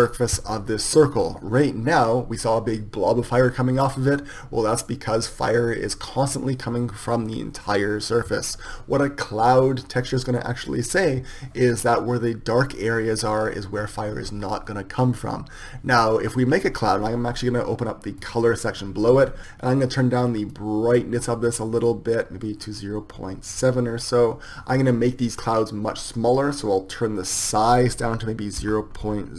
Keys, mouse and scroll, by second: 19.4 ctrl+z.